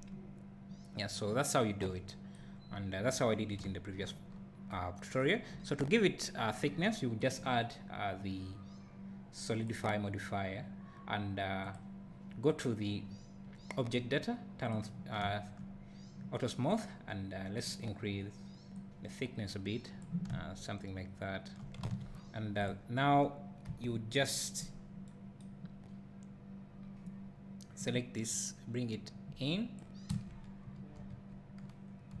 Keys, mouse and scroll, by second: 3.7 `, 4.3 scroll up 1, 5.5 `, 9.7-14.7 drag, 18.8-22.7 drag, 21.9 a, 22.1 scroll down 1, 23.0-23.7 scroll down 1, 23.7 KP_7, 24.7 scroll down 1, 27.8-32.2 drag, 30.1 KP_Decimal, 30.7 scroll down 1, 31.1 KP_4.